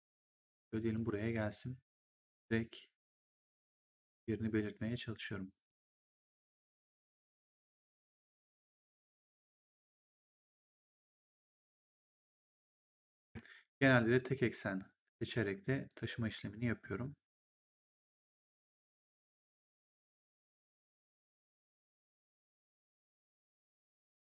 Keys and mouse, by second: 1.9 click, 4.7 click, 7.4 click, 8.9 click, 12.7 ctrl+z, 14.5 click, 15.8 click, 17.5 click, 21.1 click, 23.3 click.